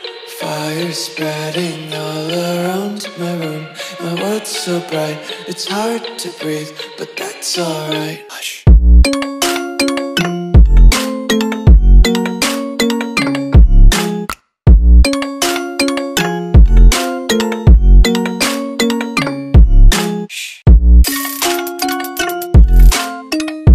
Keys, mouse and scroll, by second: 0.2 click, 4.9 ctrl+s, 12.2 click.